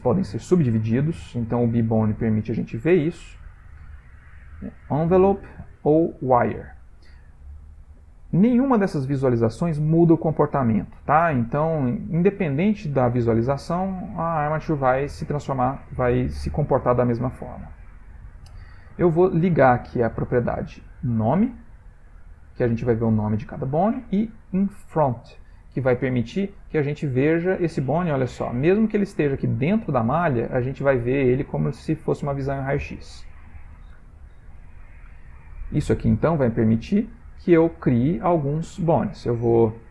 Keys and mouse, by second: 3.3 click, 5.2 click, 7.7 click, 9.4 click, 13.9 shift+middle click, 14.0 shift+middle click, 14.8 ctrl+middle click, 15.5 shift+middle click, 15.8 shift+middle click, 20.9 click, 25.0 click, 26.7 g, 29.1 middle click, 31.6 middle click, 31.8 typing, 34.5 ctrl+z, 35.0 middle click, 36.0 shift+middle click, 36.6 ctrl+middle click, 37.2 shift+middle click, 38.0 middle click, 38.8 shift+middle click.